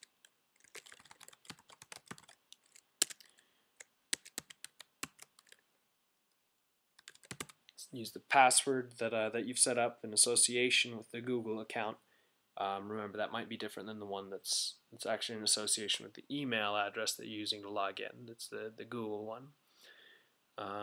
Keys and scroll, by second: 0.0-3.5 typing, 7.4-8.0 typing.